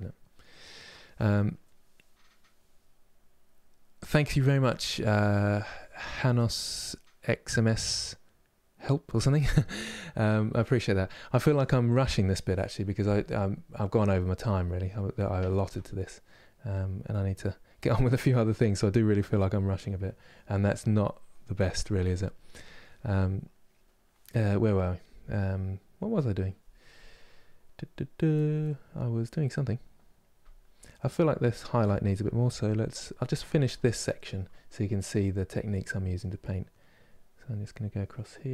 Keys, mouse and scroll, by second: 35.0 click, 35.5 middle click, 36.4-38.5 drag.